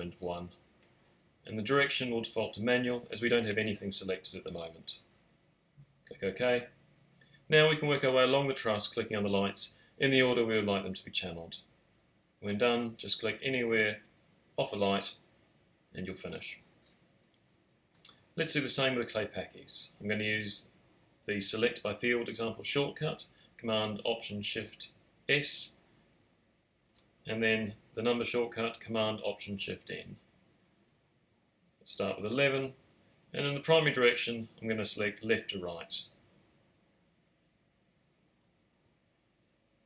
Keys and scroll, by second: 22.2 alt+shift+super+s, 23.2 Return, 27.2 alt+shift+super+n, 32.5 typing.